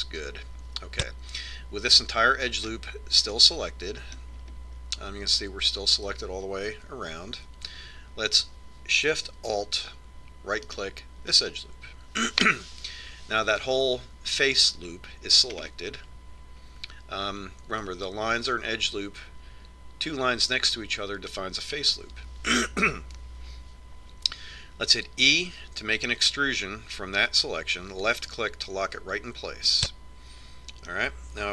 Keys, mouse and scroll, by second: 0.9-4.1 drag, 4.3-4.9 scroll up 1, 4.9-7.8 middle drag, 7.7-8.3 scroll up 1, 8.3 z, 8.9 z, 12.3-14.1 right drag, 17.2-19.3 middle drag, 27.1 e, 31.4-31.5 middle drag.